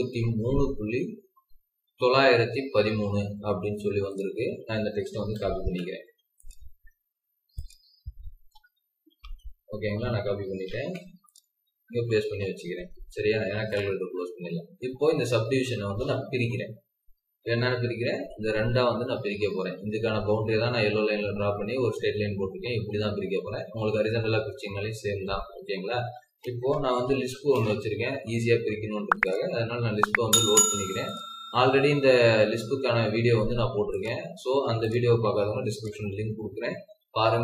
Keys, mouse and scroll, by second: 2.5-3.1 scroll down 1, 5.5 ctrl+c, 9.0 ctrl+c, 9.6-10.7 typing, 12.0 typing, 12.2 Escape, 12.3 Escape, 12.6 Escape, 14.2 Escape, 14.7-17.7 scroll down 1, 17.8 scroll up 1, 19.1 scroll down 1, 25.5-26.8 scroll up 1, 26.8 typing.